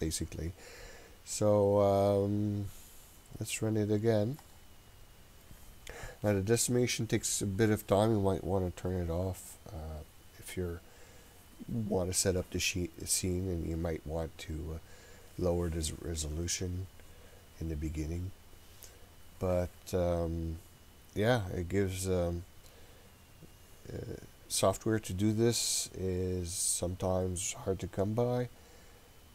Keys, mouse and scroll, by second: 4.5 click.